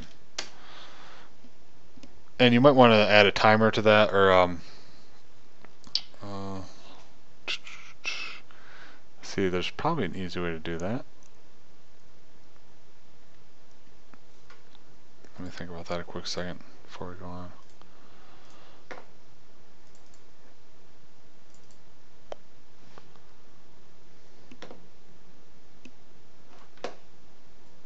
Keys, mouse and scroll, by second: 1.0 KP_0.